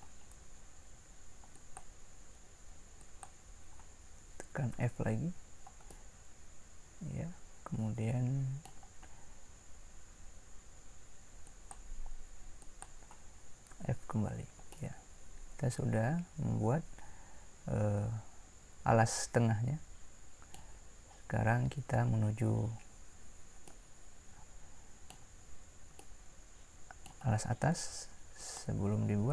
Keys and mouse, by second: 4.8 f, 13.7 f, 14.9-16.2 middle drag, 23.8-28.4 middle drag.